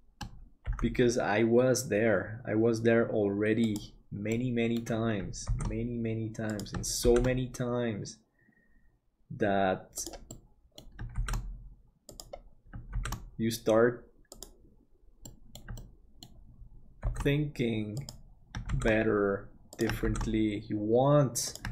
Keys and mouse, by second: 0.6 g, 4.3 middle click, 5.5 shift+d, 10.3 middle click, 11.1 shift+d, 15.3 middle click, 15.8 shift+middle click, 17.0 shift+d.